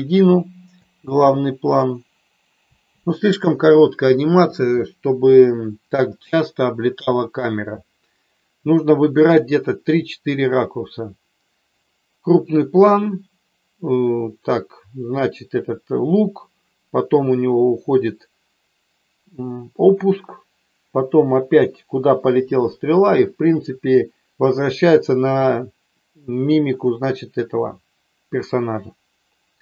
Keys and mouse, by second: 0.8 space, 2.9 space.